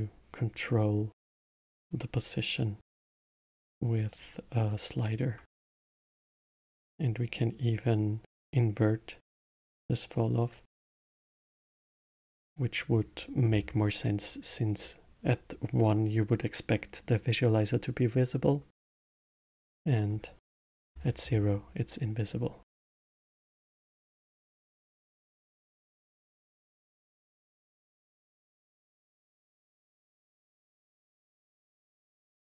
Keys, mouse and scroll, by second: 3.3-5.9 middle drag, 5.9 shift+a, 10.1-11.8 drag, 11.8-14.7 middle drag, 14.7-17.8 drag, 19.8-22.6 drag, 22.6-24.0 scroll up 7, 24.0-24.7 middle drag, 24.7 click, 26.0-27.1 middle drag, 27.1-27.9 scroll down 1, 31.1-32.4 drag.